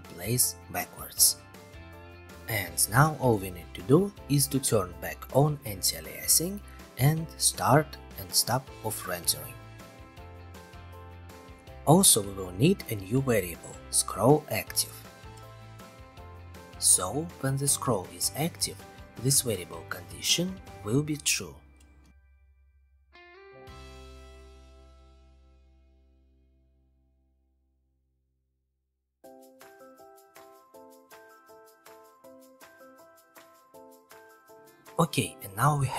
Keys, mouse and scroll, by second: 1.3 click, 3.2-3.5 scroll, 4.7 click, 5.1 right click, 6.1 click, 6.9 click, 7.1 right click, 7.8 click, 8.5-8.8 scroll, 10.6-11.6 scroll, 12.8 click, 13.5-14.8 drag, 14.5-17.6 typing, 15.5 scroll, 16.2 scroll, 18.7-19.8 drag, 20.7 click, 23.1 click, 25.1 click, 25.4 click, 26.2 click, 27.8-28.7 scroll, 28.7 click, 29.1 ctrl+c, 29.3 ctrl+v, 31.7 click, 32.4 click, 33.1 click, 34.0 scroll.